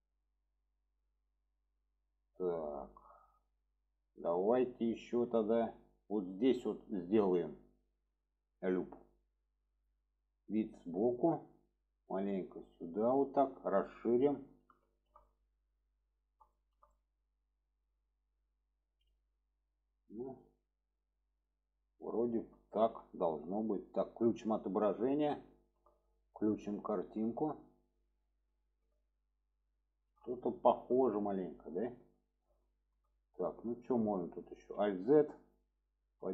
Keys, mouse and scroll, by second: 1.7-5.2 middle drag, 6.1 middle click, 7.7-8.9 drag, 10.1-11.1 middle drag, 12.2 click, 13.8-14.7 middle drag, 14.8 shift+middle drag, 15.3-15.9 middle drag, 16.5 shift+middle click, 16.9-18.7 middle drag, 22.7 shift+middle click, 24.3 click, 25.5 shift+middle drag, 27.5 click, 28.6 shift+middle click, 29.8 shift+middle click, 30.6 shift+middle drag, 31.7 shift+middle drag, 32.7 shift+middle click, 34.5 alt+z, 35.1-35.6 drag, 36.0 click.